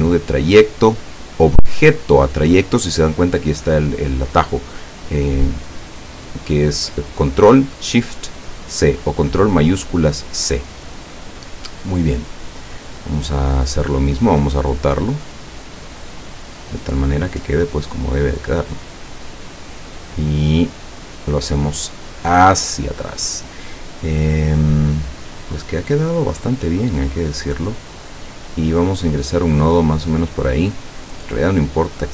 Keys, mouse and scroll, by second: 10.9 click, 12.6 click, 13.6 click, 14.5-17.0 drag, 17.6-21.5 drag, 22.1 click, 27.3 click, 28.0 click, 28.9 click, 31.6-32.1 drag.